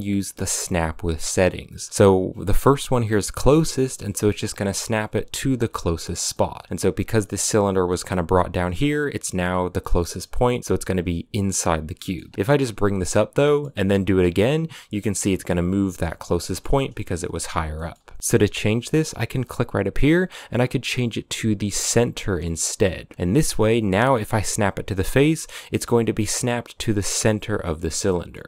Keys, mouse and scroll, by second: 3.8 g, 6.1-8.2 middle drag, 8.2 scroll down 1, 8.3-11.5 middle drag, 11.5 scroll down 3, 11.7-12.0 middle drag, 12.0 g, 13.1 scroll up 2, 13.3 middle click, 13.7 g, 15.7 middle click, 16.0 scroll up 2, 16.2 shift+middle click, 16.5 g, 17.5 scroll up 1, 17.5 middle click, 17.8 g, 23.6 g, 27.9 middle click, 28.4 g.